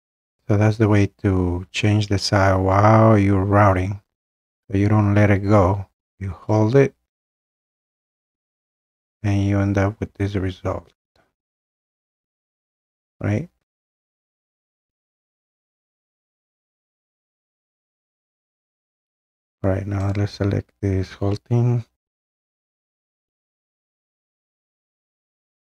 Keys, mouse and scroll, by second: 0.0 scroll, 0.8 scroll, 1.9 scroll, 4.7-5.0 scroll, 5.1 middle click, 6.3 middle click, 6.8 scroll, 7.6-8.7 scroll, 12.4 click, 13.0 middle click, 13.3 middle click, 13.8 scroll, 14.9 scroll, 20.1 click, 22.4 Delete, 23.8 click, 24.4 Delete, 25.1 click, 25.4 Delete.